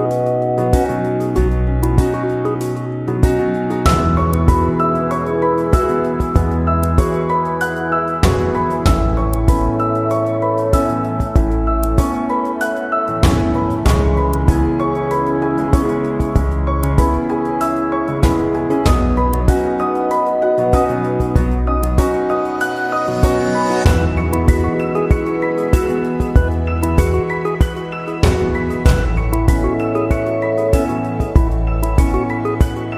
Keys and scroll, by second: 1.5 Delete, 8.0 ctrl+=, 8.7 ctrl+Left, 10.0 ctrl+z, 10.7 ctrl+z, 12.9 ctrl+[, 23.7 ctrl+c, 23.9 ctrl+v.